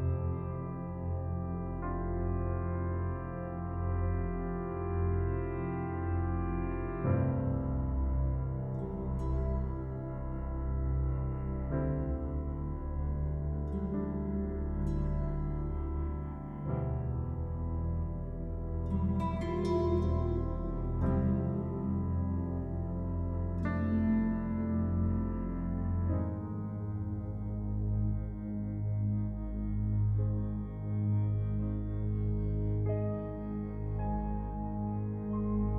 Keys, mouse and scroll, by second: 2.1 click, 2.9 scroll down 1, 4.8 click, 10.8-11.2 scroll up 1, 12.4-12.9 scroll down 1, 14.2-15.8 scroll up 1, 16.6 click, 19.1 scroll up 1, 21.0 space, 21.2 click, 21.5 space, 22.2 e, 22.6-23.1 scroll up 1, 23.8 click, 26.0 [, 28.7-29.7 typing, 28.9-29.3 scroll down 1, 29.9 click, 31.7-32.3 scroll down 1, 35.1 scroll up 1.